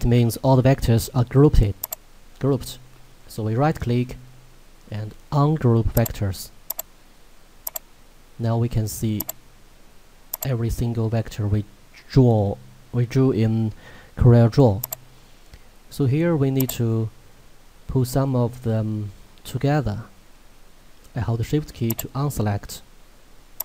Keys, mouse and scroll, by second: 1.9 right click, 6.0 click, 14.9 click.